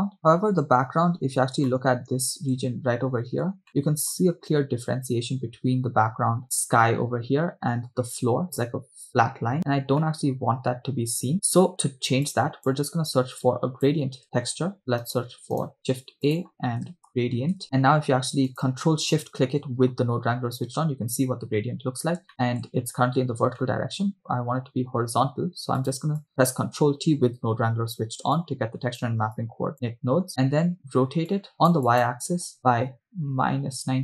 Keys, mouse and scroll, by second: 1.2 scroll up 4, 2.0-3.2 shift+middle drag, 3.7 scroll up 1, 3.7-4.5 shift+middle drag, 9.6-10.0 scroll down 4, 9.7 middle click, 10.2-11.6 shift+middle drag, 11.9 scroll down 1, 12.9 click, 13.4 click, 14.7 shift+s, 15.8 shift+a, 19.5-19.9 ctrl+shift+drag, 21.8 scroll down 2, 22.3-22.9 shift+middle drag, 23.8 middle click, 24.1 scroll up 1, 26.2 click, 27.2 ctrl+t, 28.9 click, 29.3 click, 29.8 middle click, 31.7 click, 32.0-34.0 drag.